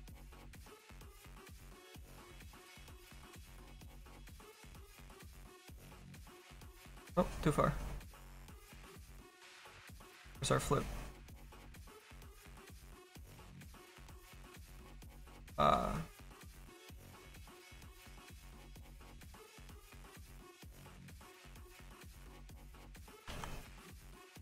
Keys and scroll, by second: 21.0 ctrl+z, 23.2 ctrl+z.